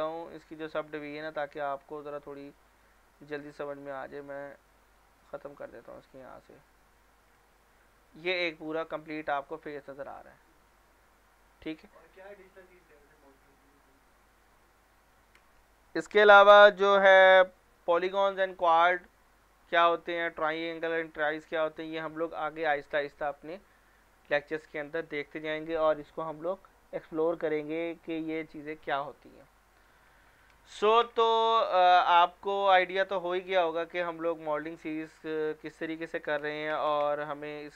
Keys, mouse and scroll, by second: 0.6 click, 5.4 scroll down 1, 5.6 middle click, 5.9 scroll up 1, 6.2 middle click, 6.6 Tab, 7.8 scroll down 1, 8.0 middle click, 8.4 scroll up 1, 9.1 middle click, 15.2 click, 29.8 click, 33.0 click, 34.8 scroll down 1, 35.1 middle click, 35.7 Caps_Lock, 37.0 Tab.